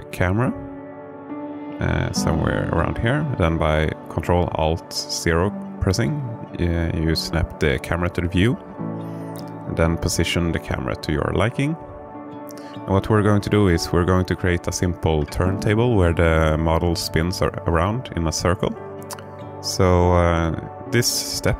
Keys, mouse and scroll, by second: 7.0 ctrl+alt+KP_0, 10.1 q, 13.4-15.2 typing, 16.2-19.1 typing.